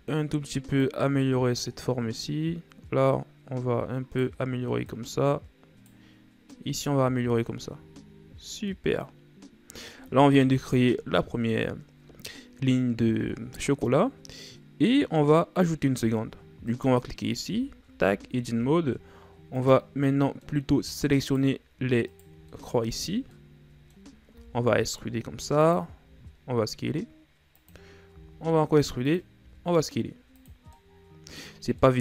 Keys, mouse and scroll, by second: 2.2 right click, 4.9 right click, 6.5 right click, 7.2 Tab, 7.8-8.7 scroll down 4, 8.7-10.4 middle drag, 10.4 KP_1, 12.4-14.6 scroll up 2, 16.6 right click, 17.4 Tab, 18.0-18.7 ctrl+scroll up 3, 18.7-19.6 shift+scroll up 4, 19.6 right click, 19.9 scroll down 1, 20.0-21.2 middle drag, 21.2 shift+right click, 22.1 shift+right click, 22.5 middle click, 22.8 scroll up 1, 23.1 shift+scroll down 2, 23.3-24.3 middle drag, 24.3 e, 26.0 s, 30.7-32.0 middle drag.